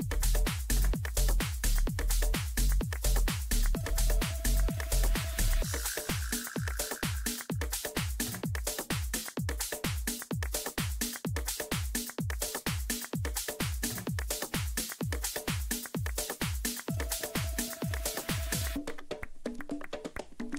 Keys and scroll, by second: 3.6 Down, 4.1 Up, 19.5 space.